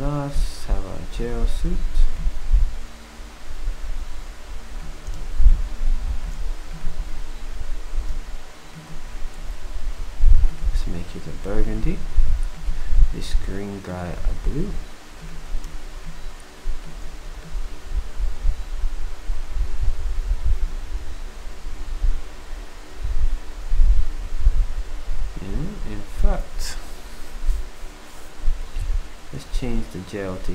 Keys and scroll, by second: 13.1 d.